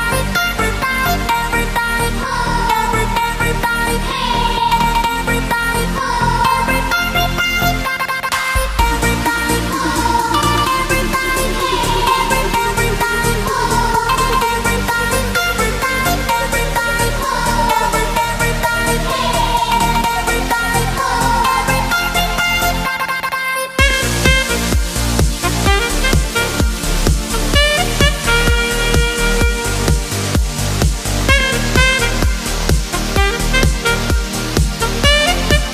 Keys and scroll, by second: 14.1 b.